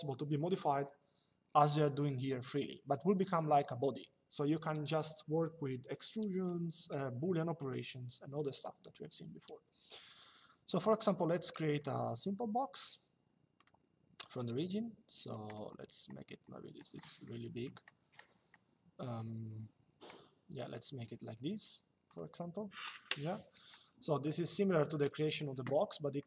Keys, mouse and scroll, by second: 10.5 click, 13.3 click, 16.9 middle click, 21.8 click, 24.0 shift+middle click, 25.9 click.